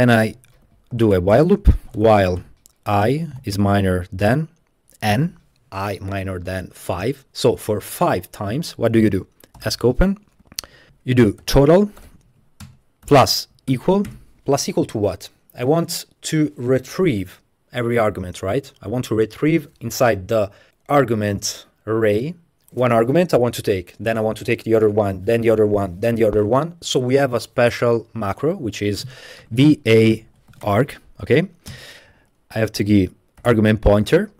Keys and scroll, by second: 0.4-3.4 typing, 4.7-5.1 typing, 9.6 Escape, 9.7-14.1 typing, 12.7 Return, 29.2-31.0 typing, 31.7 Return, 33.2-34.3 typing, 34.1 Tab.